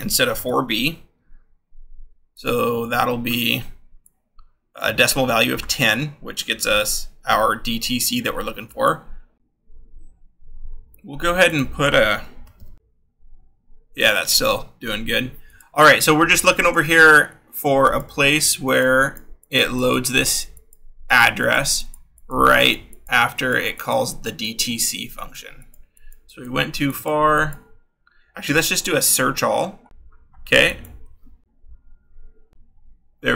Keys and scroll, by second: 0.1 BackSpace, 0.7 a, 12.5 shift+3, 29.9-31.4 scroll, 31.4 Down.